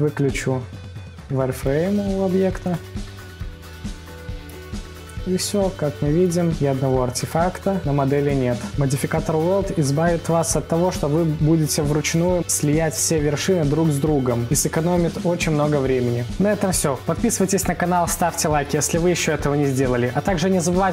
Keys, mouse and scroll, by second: 1.8 click, 2.9-4.4 drag, 4.4 scroll, 4.4 scroll up 3, 5.0-6.8 middle drag, 6.8 scroll, 6.8-7.6 scroll down 3, 7.6-8.4 scroll up 4, 8.4 scroll up 1, 8.4-8.8 scroll down 3, 8.8-10.2 middle drag, 10.2 scroll, 10.3 scroll down 1, 10.4-11.0 scroll up 3, 11.0 scroll down 2, 11.1 scroll up 1, 11.2-11.8 scroll down 1, 11.8-15.6 right drag, 15.6-16.5 middle drag, 16.4-17.0 scroll up 2, 17.0-18.1 middle drag, 18.1 scroll, 18.1 scroll down 1, 18.2-18.7 scroll up 1, 18.7 scroll down 1, 18.7-19.3 scroll up 1, 19.3-19.7 scroll down 2, 19.7-20.4 scroll up 1, 20.4 scroll up 1, 20.5-20.9 scroll down 3.